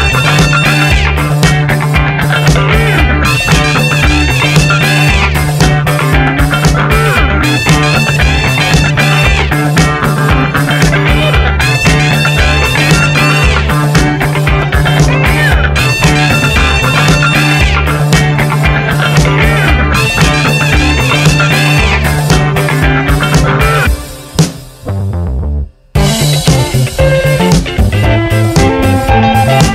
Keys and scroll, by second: 18.4 b, 20.5 space, 27.0 v, 28.1 ctrl+t.